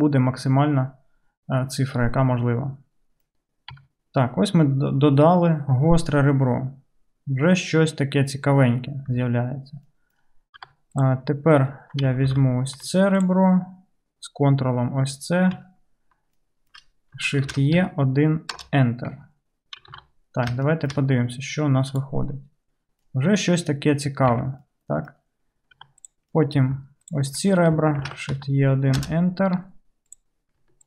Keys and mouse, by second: 3.8 Tab, 7.6 click, 7.6 right click, 7.8 drag, 7.8 right drag, 8.5-9.2 drag, 8.5-9.2 right drag, 9.2 Tab, 10.7 2, 11.0-13.2 drag, 12.4 alt+z, 13.2 ctrl+middle click, 13.3-22.4 ctrl+drag, 17.5 shift+e, 19.2 Tab, 19.9 alt+z, 21.9 KP_Decimal, 22.4-26.6 middle drag, 24.4 Tab, 25.8 2, 26.6-30.1 ctrl+drag, 28.1 shift+e, 30.1 middle click, 30.2 click.